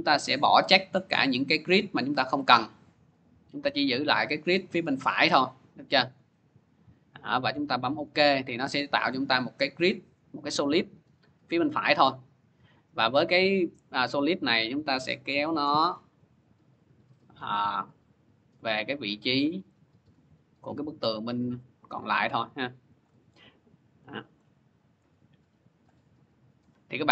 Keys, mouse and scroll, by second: 0.5 click, 1.5 click, 2.9 click, 4.4 click, 5.9 click, 7.8 click, 10.7 click, 22.7 shift+click, 23.3 middle click, 24.0-24.7 scroll, 26.8 scroll.